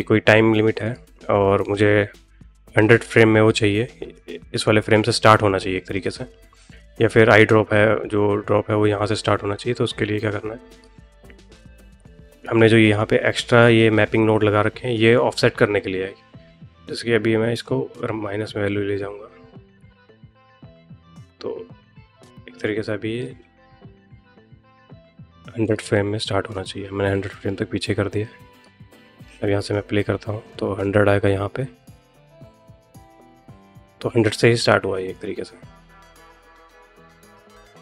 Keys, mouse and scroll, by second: 0.7 click, 2.6 click, 4.0 middle click, 25.5 click, 27.1-28.5 drag, 29.1 space, 35.0-37.8 middle drag.